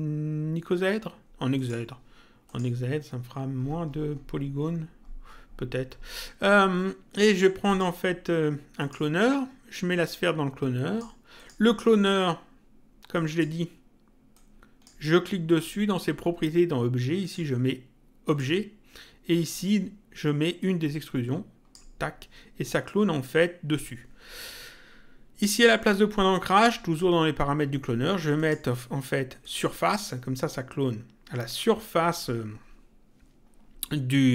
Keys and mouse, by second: 1.5 click, 7.7 click, 8.7 click, 9.9 click, 11.3 click, 13.1 click, 14.3 click, 15.5 click, 17.2 click, 20.5 click, 28.3 click.